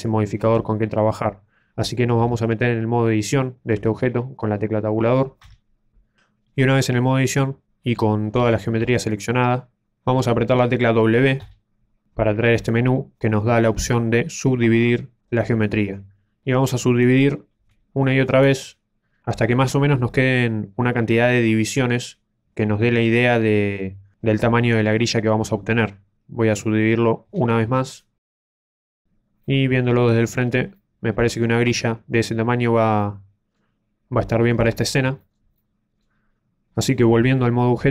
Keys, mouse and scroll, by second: 2.1 z, 5.4 Tab, 6.3 middle click, 8.9 middle click, 11.4 w, 17.1 ctrl+z, 17.1 w, 20.4 middle click, 27.2 w, 28.3 middle click, 28.5 a, 28.6 middle click, 29.4 middle click, 30.0-30.7 scroll up 5, 30.7 middle click, 31.6-32.6 scroll up 2, 32.9 middle click, 34.4-34.9 scroll down 3, 35.1 shift+middle click, 35.1 scroll down 4, 35.5 middle click.